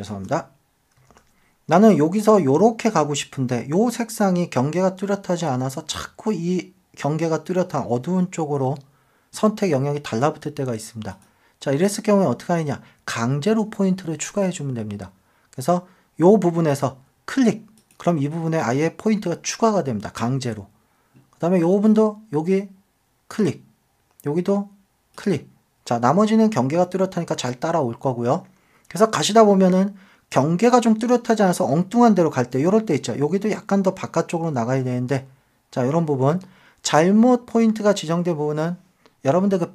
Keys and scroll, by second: 0.1 super+z, 1.1 super+d.